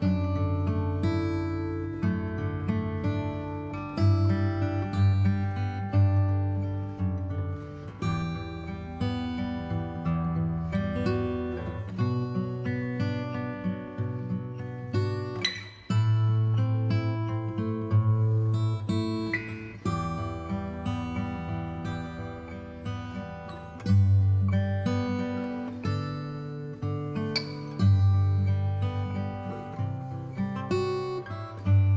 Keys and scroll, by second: 4.9 alt+space, 7.5 ctrl+d, 17.2 b, 19.6 ctrl+d.